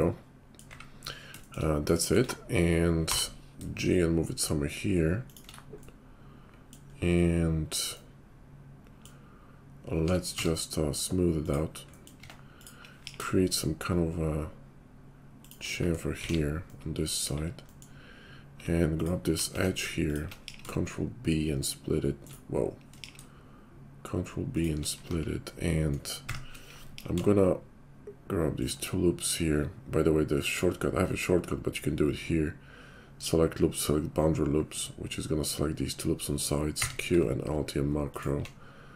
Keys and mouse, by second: 0.7 `, 3.0 g, 10.3 q, 12.2 Tab, 12.5 click, 13.0 ctrl+b, 16.2 alt+x, 17.2 KP_5, 19.5 Tab, 20.1 alt+click, 20.4 ctrl+b, 22.9 ctrl+b, 25.1 Tab, 26.3 shift+`, 26.9 ctrl+b, 26.9-30.5 ctrl+shift+middle drag, 30.5-38.4 drag, 36.6 q.